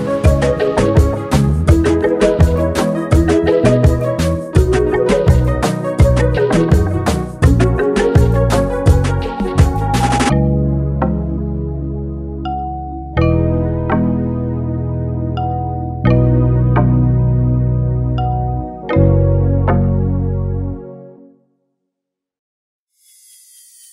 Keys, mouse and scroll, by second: 1.6-2.2 typing, 2.2-6.6 drag, 7.9 typing, 8.8-13.0 drag, 16.3 right click, 17.8-18.3 click, 21.4 click, 23.6 right click.